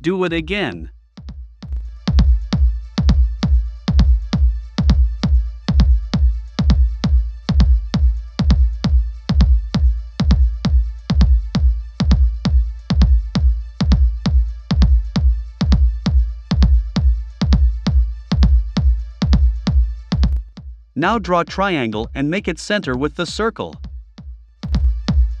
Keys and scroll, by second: 20.3 3.